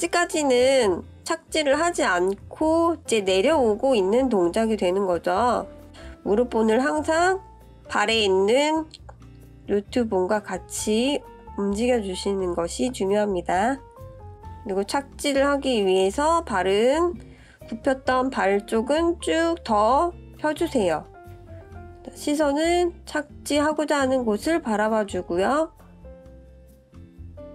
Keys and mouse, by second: 0.0 click, 2.3 click, 7.1 ctrl+z, 7.4 click, 8.1 click, 8.7 click, 9.1 click, 9.8 click, 10.0 click, 10.4 click, 10.5 middle click, 10.7 middle drag, 10.9 ctrl+KP_3, 11.1 ctrl+z, 11.4 shift+click, 11.5-12.2 middle drag, 12.4 ctrl+KP_3, 12.8 click, 13.5-14.5 drag, 15.4-19.0 drag, 25.4 click, 26.4 click, 27.3-27.5 drag.